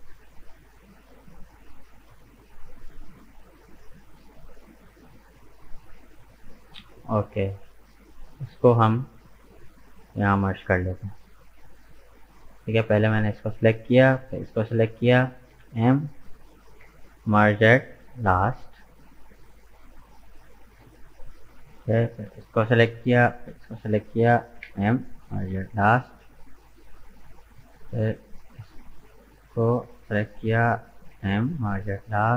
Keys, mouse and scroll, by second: 2.1-3.7 middle drag, 3.7 right click, 4.1-8.4 middle drag, 8.4 shift+right click, 8.8-13.4 middle drag, 13.4 right click, 14.3 shift+right click, 15.5 m, 18.4-21.4 middle drag, 22.4 right click, 23.5 shift+right click, 24.5 m, 26.0-27.5 middle drag, 27.5 right click, 28.4 shift+right click, 28.8-31.1 middle drag, 31.1 m.